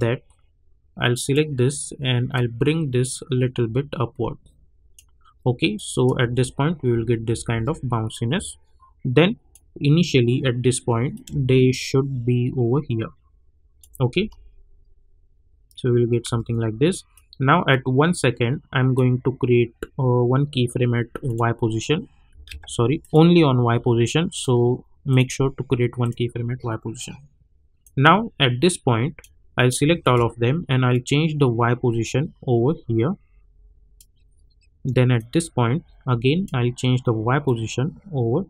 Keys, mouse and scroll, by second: 6.2 space, 8.1-14.1 drag, 14.1 space, 16.2 space, 17.1-21.2 drag, 22.4 ctrl+z, 23.0-38.4 drag.